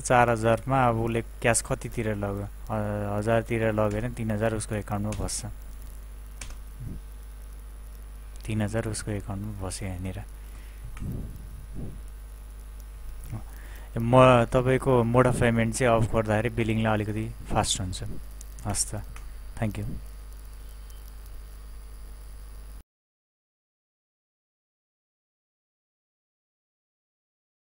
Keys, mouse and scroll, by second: 3.9 Return.